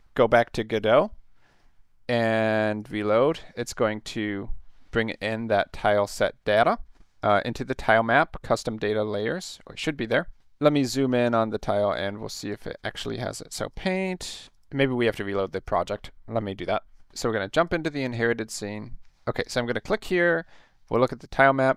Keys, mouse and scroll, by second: 0.8 click, 2.8 click, 3.7 middle click, 4.1-4.5 scroll up 2, 5.2 click, 7.2 click, 8.4 click, 10.4 middle click, 10.9 middle click, 11.1 middle click, 11.3 middle click, 12.1 middle click, 12.4 click, 13.2 click, 13.7 click, 14.5 click, 15.7 click, 17.6 click, 18.9 Escape, 19.4 click, 20.9 click.